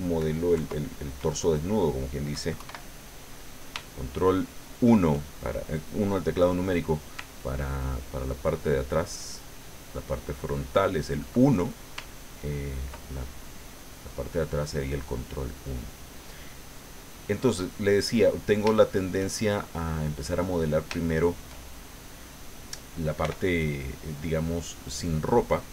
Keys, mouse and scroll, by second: 0.6 ctrl+KP_3, 2.6 ctrl+KP_1, 3.9 shift+middle click, 7.5-9.4 ctrl+drag, 9.8-11.3 ctrl+drag, 12.1 ctrl+click, 13.1 ctrl+click, 14.1 click, 15.0 click, 15.7 click, 16.5 click, 17.2 click, 18.7 shift+click, 19.7 middle click, 20.4 middle click, 21.0 shift+middle click, 21.9 middle click, 23.2 f, 24.3 click, 24.9 middle click.